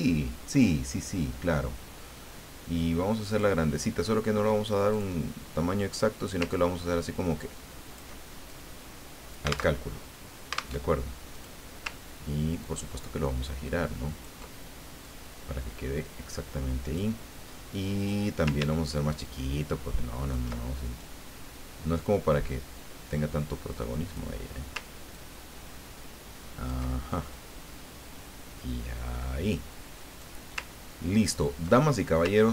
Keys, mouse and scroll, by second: 3.3 click, 4.9 click, 5.9 click, 6.5-8.1 ctrl+drag, 8.4-9.8 ctrl+drag, 9.8 alt+Tab, 10.8 alt+Tab, 11.4 click, 12.6-14.6 ctrl+drag, 15.0-17.2 drag, 18.0 click, 19.2-20.5 ctrl+shift+drag, 21.1-24.6 drag, 25.1-27.2 ctrl+drag, 27.3-30.2 drag, 30.8-31.6 ctrl+scroll down 4, 31.8 ctrl+click, 32.4-32.5 ctrl+scroll down 2.